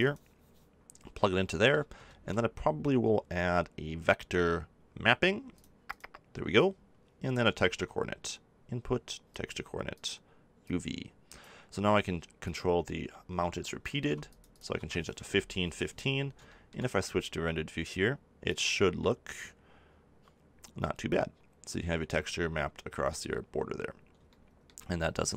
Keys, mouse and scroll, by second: 1.2 click, 5.9-9.5 drag, 10.6-15.8 shift+drag, 15.8 middle click.